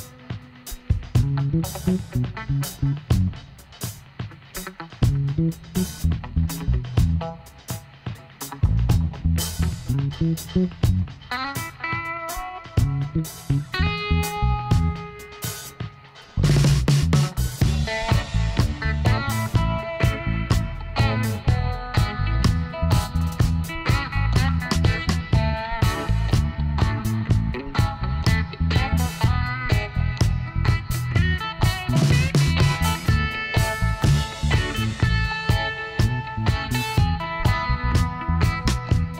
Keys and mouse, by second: 0.1 middle click, 0.4 Tab, 1.5 Tab, 3.3 click, 4.1-9.2 middle drag, 9.2 click, 10.0 middle click, 12.7-14.4 drag, 14.7 middle click, 15.1-17.1 middle drag, 16.1 l, 17.1 h, 17.5 middle click, 19.6 middle click, 20.7-21.7 middle drag, 21.8-23.2 middle drag, 23.2 KP_1, 26.2 middle click, 28.1 z, 30.3 click, 30.9 middle click, 31.4 click, 31.4-32.7 right drag, 31.7 x, 33.6 c.